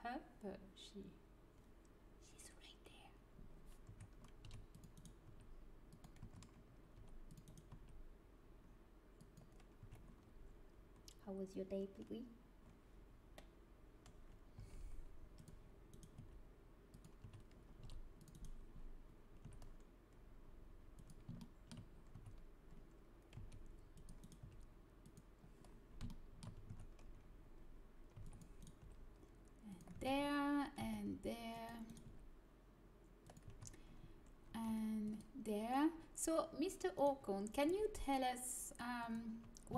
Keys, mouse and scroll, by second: 3.9 a, 4.4 c, 5.1 right click, 5.2 g, 6.2 a, 6.9 click, 6.9 right click, 7.6 g, 8.5 click, 9.7 a, 14.7 c, 16.1 g, 17.2 a, 17.9 c, 19.4 g, 21.3-22.6 drag, 22.1 a, 23.6 c, 24.3 g, 26.0 middle click, 26.6 a, 28.1 c, 28.7 g, 30.0 a, 32.0 g, 34.4 c, 37.0-39.0 right drag, 37.6 g, 38.8 click.